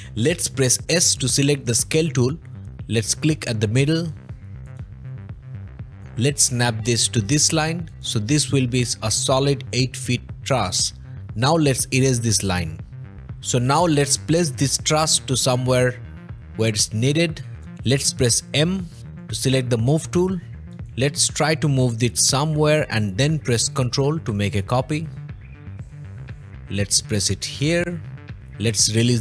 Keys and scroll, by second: 2.6 s, 11.4 e, 13.2 Escape, 13.2 m, 18.9 m.